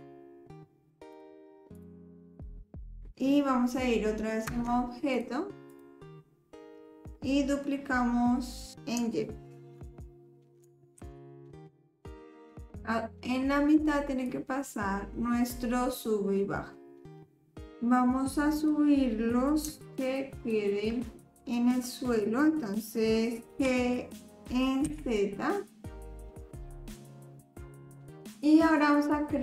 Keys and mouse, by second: 1.1 click, 4.5 Tab, 5.1 click, 5.7 click, 11.0 shift+d, 11.8 middle drag, 12.2 click, 12.5 middle click, 14.2-17.6 drag, 18.6 click, 20.4 shift+click, 21.3 middle click, 23.5 g.